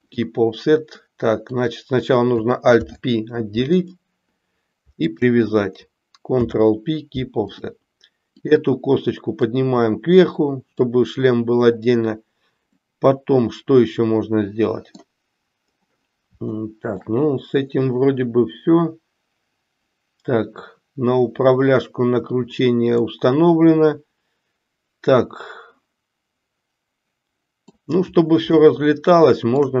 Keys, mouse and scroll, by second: 2.7 alt+p, 5.1 shift+click, 6.3 ctrl+p, 9.4-10.8 drag, 12.7 scroll up 1, 12.9-15.1 middle drag, 16.4 shift+middle click, 23.1-27.7 middle drag, 27.7 scroll down 1, 28.5-29.7 shift+middle drag.